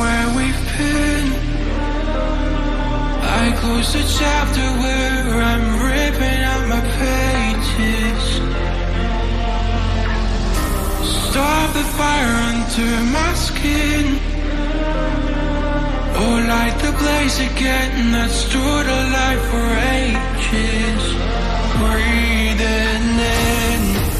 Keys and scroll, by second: 0.9 Up, 1.6 Up, 6.5 Down, 20.2 Down, 20.2 Up, 20.7 Left, 22.6 Left, 23.0 Right.